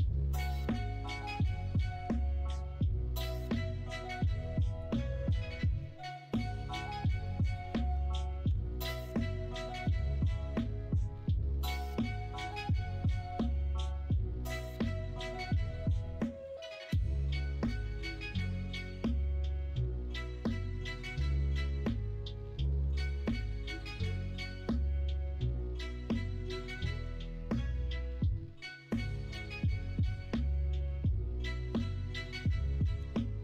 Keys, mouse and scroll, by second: 5.6 ctrl+z, 8.4 g, 10.0 ctrl+z, 20.8 click, 21.0 ctrl+z, 22.6 1, 25.5 2, 28.5-32.0 drag, 32.9 g.